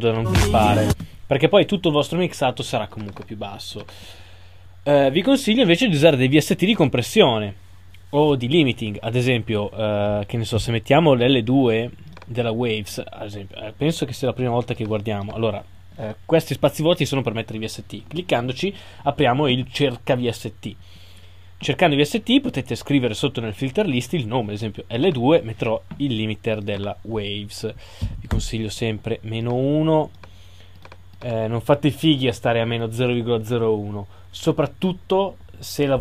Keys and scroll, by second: 28.3 Return.